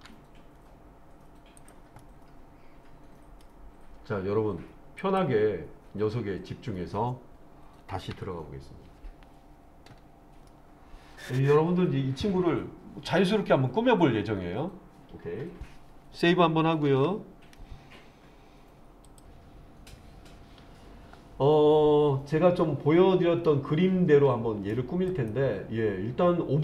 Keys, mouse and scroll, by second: 1.6 click, 2.0-3.5 middle drag, 5.0 click, 8.1 /, 10.5-11.3 middle drag, 16.9 ctrl+s, 19.3-19.9 scroll up 2, 23.5-24.7 middle drag, 25.1 click.